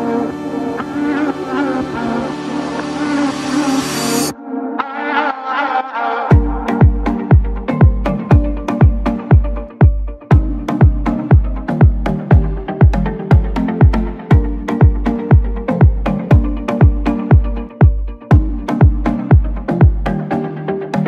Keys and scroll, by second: 6.4 Escape.